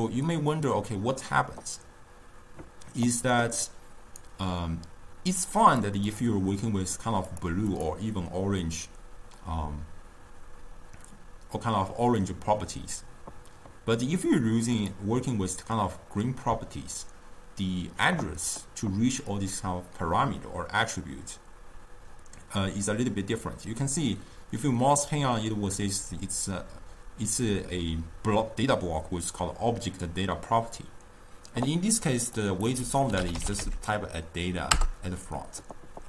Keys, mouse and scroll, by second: 5.7 click, 6.1 click, 7.3 click, 7.7 click, 14.8 click, 32.3-35.4 drag.